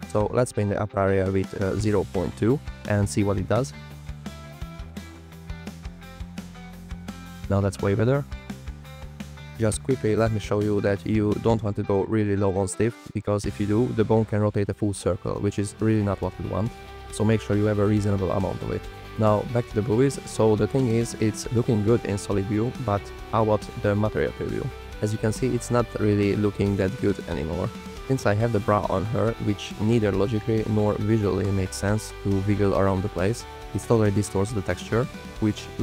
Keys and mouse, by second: 0.2 click, 2.9 click, 4.2 alt+click, 5.5 click, 5.8 click, 5.9 f, 5.9 click, 7.0 click, 7.2 g, 7.8 g, 11.1-12.4 drag, 12.2 KP_0, 13.6 click, 13.8 g, 15.9 space, 17.0 g, 17.6 space, 17.7 space, 18.2 space, 20.3 drag, 24.7 drag, 25.1 g, 26.2 click, 27.7 g, 30.1 g, 31.5-32.2 drag, 33.4 f, 33.9 click, 35.2 shift+f.